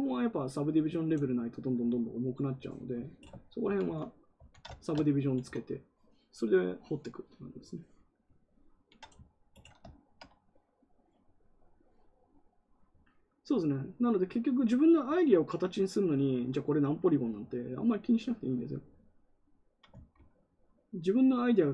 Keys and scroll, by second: 3.5 ctrl+z, 3.7 ctrl+z, 4.3 ctrl+z, 5.1 ctrl+z.